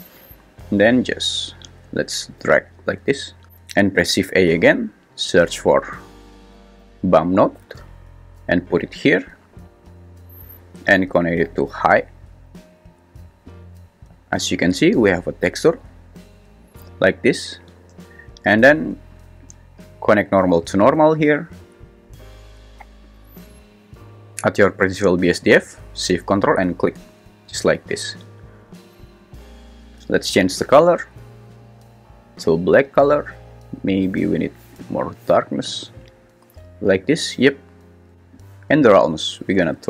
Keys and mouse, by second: 1.2-1.7 drag, 2.4 g, 4.3 shift+a, 11.5 click, 11.8-12.6 drag, 13.5 click, 13.8 click, 19.4 click, 19.8-22.8 drag, 26.9 shift+click, 30.1 click, 38.5-39.8 drag.